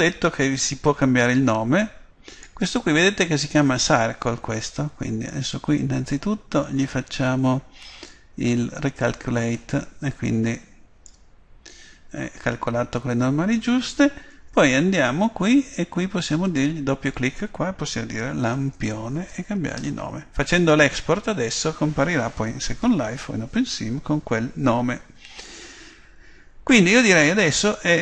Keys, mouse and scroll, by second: 1.3-3.3 middle drag, 4.7-9.0 middle drag, 9.0 click, 10.3-12.2 middle drag, 12.5 middle click, 14.3 Tab, 16.2 click.